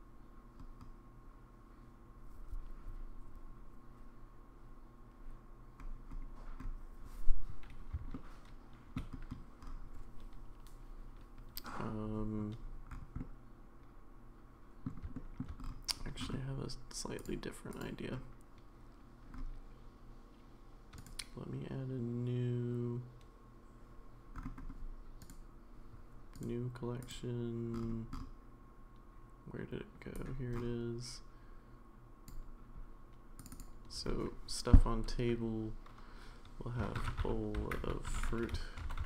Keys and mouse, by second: 8.1-9.0 shift+middle drag, 13.2-14.9 middle drag, 15.1 shift+middle drag, 17.7 click, 21.0-23.8 right drag, 25.2-25.8 right drag, 26.4-27.1 right drag, 30.2-32.3 drag, 33.5-39.0 drag.